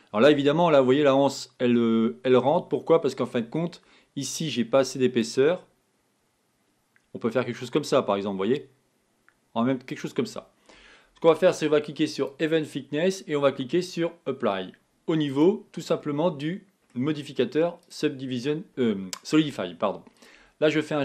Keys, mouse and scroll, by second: 5.3-8.7 drag, 12.2 click, 15.4 click, 16.2-17.9 middle drag, 17.9-20.7 right drag, 20.7-21.0 middle drag.